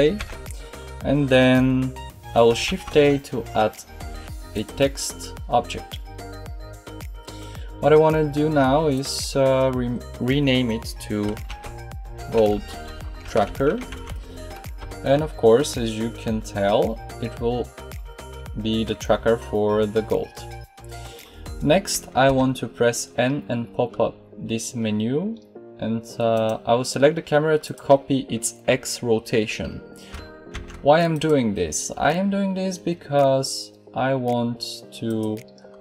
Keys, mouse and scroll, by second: 0.1 n, 2.6 shift+a, 22.2 n.